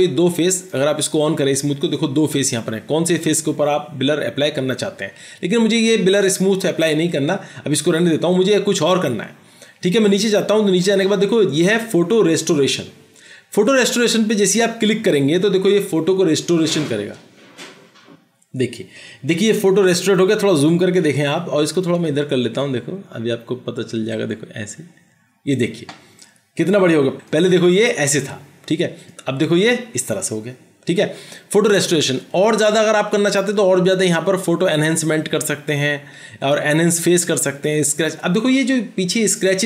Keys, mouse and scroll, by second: 21.1 ctrl+=.